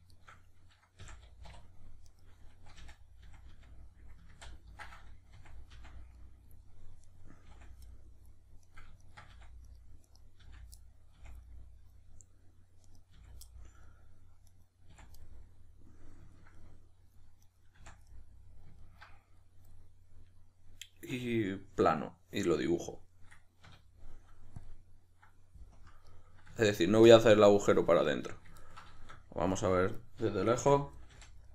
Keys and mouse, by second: 0.1 shift+right click, 1.0 f, 2.0 right click, 2.8 f, 6.1-7.1 middle drag, 7.1 right click, 7.5 f, 7.9-8.6 middle drag, 8.6 right click, 9.0 shift+right click, 9.3 f, 9.7 right click, 10.1 right click, 10.4 f, 10.8-12.9 middle drag, 11.1 f, 12.9 right click, 13.1 f, 13.5-14.5 middle drag, 14.5 right click, 14.9 f, 15.3-17.5 middle drag, 17.5 right click, 17.8 f, 18.1-23.6 middle drag, 23.6 q, 25.8 KP_Decimal, 26.1-31.5 middle drag, 30.6 f.